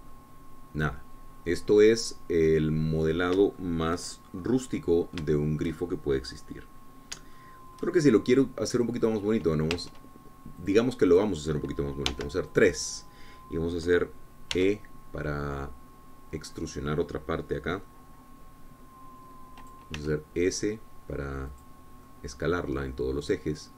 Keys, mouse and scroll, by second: 0.5 shift+scroll up 2, 1.0 scroll down 1, 1.3-4.6 middle drag, 4.8 shift+middle click, 5.5-5.9 shift+scroll up 1, 5.9-7.4 middle drag, 7.5 scroll up 1, 8.6 shift+click, 9.5 click, 10.9 Tab, 11.9 click, 12.4 click, 13.3 3, 13.7 click, 15.7 e, 20.8 click, 21.2 s, 22.7 click, 23.3-23.7 middle drag.